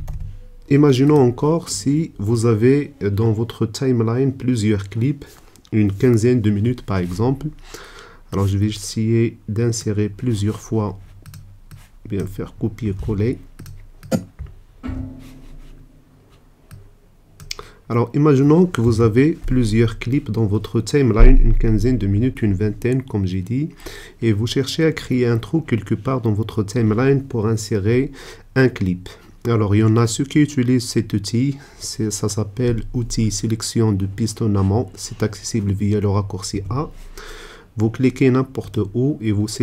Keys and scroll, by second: 13.0 super+c, 14.8 super+v, 36.9 a.